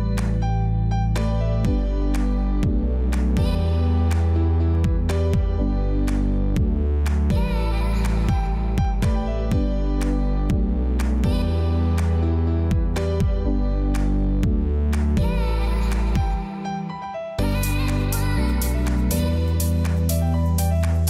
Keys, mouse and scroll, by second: 0.0-0.7 typing, 0.7 click, 1.7 ], 2.0 click, 3.6 typing, 6.3 click, 6.7 [, 8.2-9.0 typing, 8.4 click, 9.1 click, 14.7 click, 16.5-16.9 typing, 18.7 typing, 20.1 click.